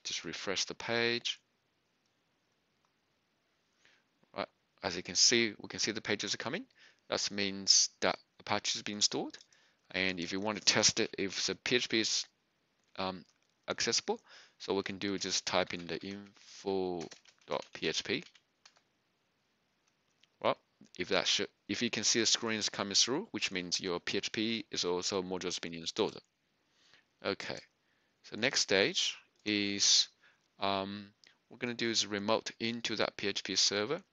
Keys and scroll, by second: 0.2 ctrl+r, 11.7 typing, 15.6-18.6 typing, 18.6 Return.